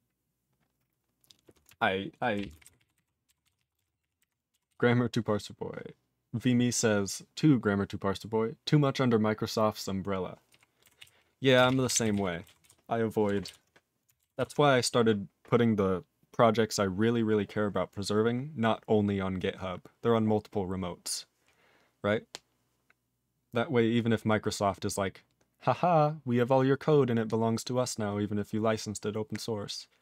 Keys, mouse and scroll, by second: 2.3 ctrl+a, 2.4 ctrl+p, 2.5 ctrl+space, 2.6 ctrl+e, 2.6 ctrl+n, 2.8 ctrl+e, 3.0 ctrl+g, 3.4 ctrl+s, 3.6 ctrl+a, 3.8 ctrl+space, 3.8 ctrl+e, 3.8 ctrl+n, 4.0 ctrl+e, 4.2 ctrl+g, 4.7 ctrl+s, 10.5 ctrl+e, 11.0 ctrl+s, 11.5 ctrl+space, 11.6 ctrl+a, 11.7 ctrl+p, 11.9 ctrl+g, 11.9 ctrl+e, 12.0 ctrl+n, 12.1 ctrl+e, 12.6 ctrl+s, 13.5 ctrl+s, 14.4 ctrl+s.